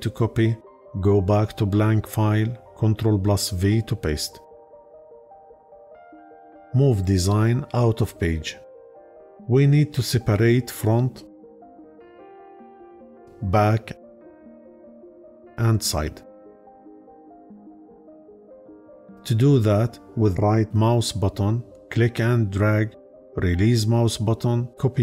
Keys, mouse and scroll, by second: 2.7 ctrl+v, 20.0-25.0 right drag.